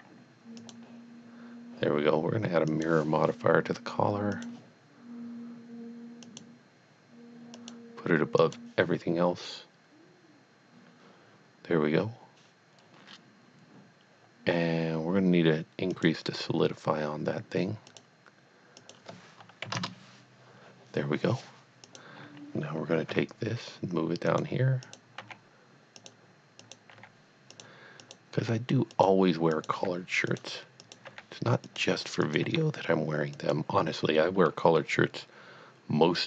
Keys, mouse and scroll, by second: 0.6 click, 2.7 click, 4.3 click, 6.3 click, 7.6 click, 8.4 click, 15.9 click, 16.2 click, 17.9 click, 18.8 click, 19.6 KP_2, 19.8 KP_Enter, 21.8 click, 23.1 g, 24.3 click, 24.9 click, 25.2 g, 26.1 click, 26.6 click, 26.9 g, 27.6 click, 28.0 click, 28.6 g, 29.0 click, 29.7 g, 30.4 click, 30.9 click, 31.1 g, 31.7 click, 32.4 g, 33.4 click, 34.4-34.8 scroll up 1, 34.9 middle click, 35.2 middle click.